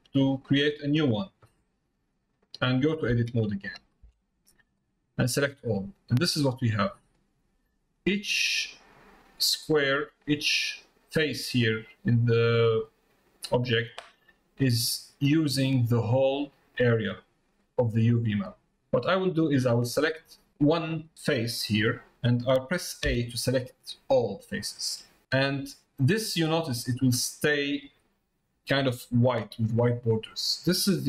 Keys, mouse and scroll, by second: 2.2 middle click, 7.2 middle click, 11.9 middle click, 14.2 middle click, 15.2 middle click, 19.6 click, 30.5 middle click.